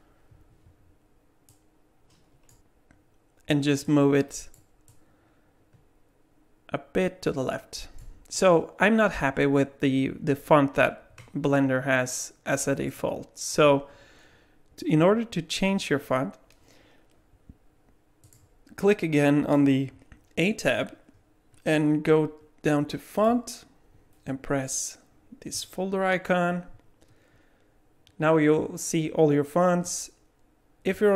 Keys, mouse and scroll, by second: 1.5 click, 3.8 click, 4.9 click, 12.9 middle click, 18.2 click, 21.5-22.0 scroll down 1, 22.0-23.2 scroll down 2, 23.2 click, 25.5 click.